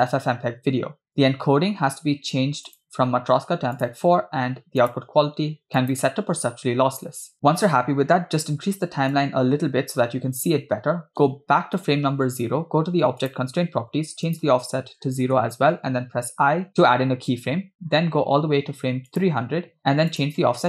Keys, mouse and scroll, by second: 1.2 click, 1.7-2.0 scroll down 2, 2.8-3.9 drag, 4.9-6.0 drag, 9.2 click, 11.9 Left, 13.4 click, 14.3 click, 16.4 i, 18.1-18.6 scroll down 2, 19.2 click, 20.2-20.6 drag.